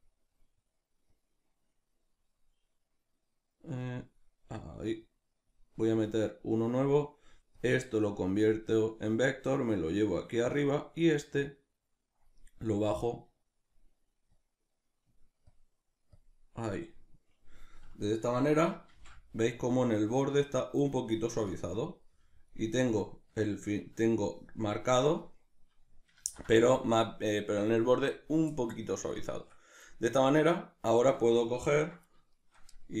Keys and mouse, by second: 18.9 shift+f, 22.8-33.0 ctrl+middle drag, 26.2 ctrl+z.